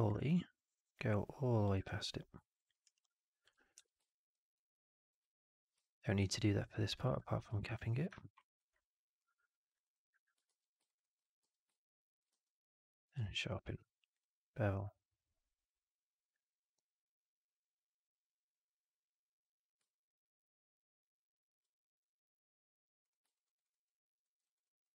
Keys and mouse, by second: 1.2 click, 1.8 alt+click, 2.8 alt+right click, 2.9 alt+click, 4.0 middle drag, 4.5-5.0 drag, 6.8 click, 7.0 2, 7.5 click, 8.3 alt+right click, 9.6 click, 10.5 ctrl+f, 10.8 right click, 10.9 click, 11.4 4, 12.2 q, 13.6 q, 23.3 alt+right drag, 23.5 alt+right drag, 23.6 alt+drag, 24.1 alt+middle drag, 24.4 alt+right drag, 24.6 alt+drag.